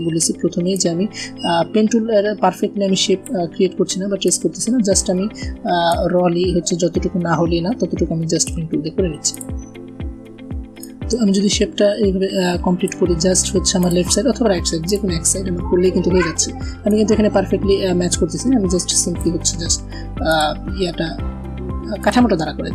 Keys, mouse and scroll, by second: 0.6-3.1 drag, 15.4 alt+scroll up 1, 16.8-19.3 drag.